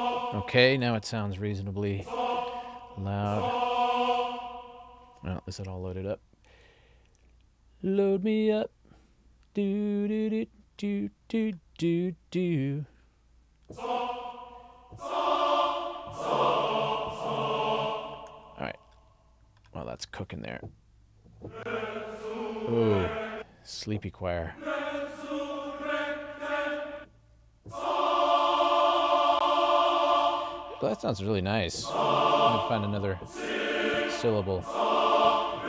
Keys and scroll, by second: 27.4 Up.